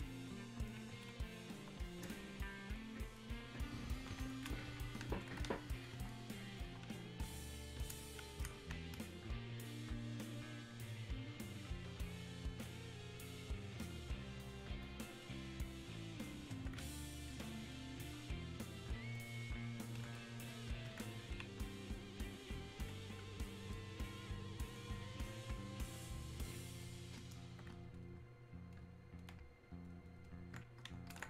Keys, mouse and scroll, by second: 2.4-11.0 drag, 11.0-15.3 ctrl+drag, 17.1 ctrl+click, 26.5 click.